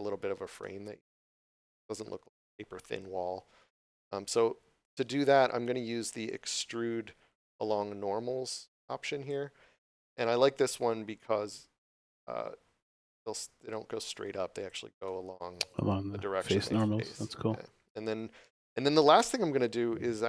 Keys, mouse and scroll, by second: 1.6 scroll down 1, 1.6 middle click, 2.3 scroll up 1, 2.7 middle click, 14.9 middle click.